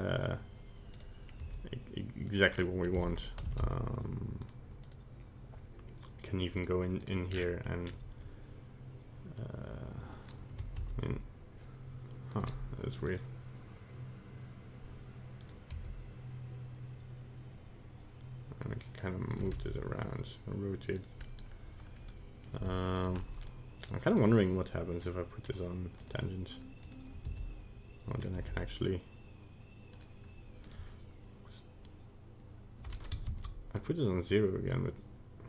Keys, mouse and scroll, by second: 1.5 r, 2.6 middle click, 3.0 r, 4.9 right click, 6.2 click, 6.6 click, 7.0 click, 7.3 scroll down 8, 7.9-8.6 scroll up 1, 8.6-9.0 scroll up 1, 9.4 click, 11.0 ctrl+z, 12.3 right click, 13.1 right click, 15.4 right click, 15.8 g, 19.6 r, 21.3 middle click, 22.7 r, 23.2 middle click, 23.4 middle click, 23.9 right click, 24.1 right click, 25.0 click, 26.9 right click, 27.3 r, 28.4 g, 30.7 right click, 31.9 click, 33.5 ctrl+z, 33.8 click.